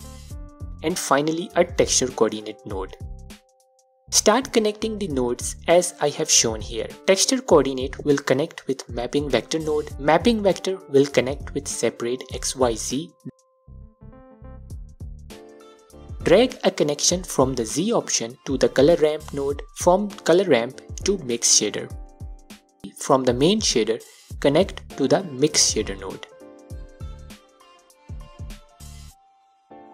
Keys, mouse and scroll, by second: 0.1 click, 0.7 shift+a, 5.2 click, 7.0-7.7 scroll up 2, 7.7-8.7 scroll up 1, 8.7 scroll up 1, 8.8-9.5 middle drag, 9.5-9.9 scroll up 2, 10.3 click, 12.3 click, 13.2 drag, 14.6 scroll down 2, 14.7-15.4 middle drag, 15.4-16.3 scroll up 2, 16.3 drag, 17.6 scroll down 1, 17.7-21.6 middle drag, 18.6 scroll up 1, 19.7 click, 21.6 click, 22.8 scroll down 1, 23.0-24.0 middle drag, 24.0 click, 27.0 scroll down 1, 27.1-28.7 middle drag, 28.1-28.7 scroll up 2, 29.1-29.9 middle drag.